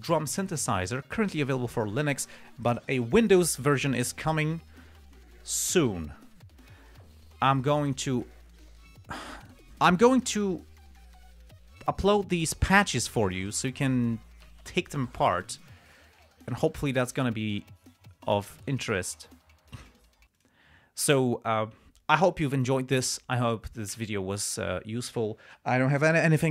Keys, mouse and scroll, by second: 16.3-16.7 scroll up 2, 20.7 click.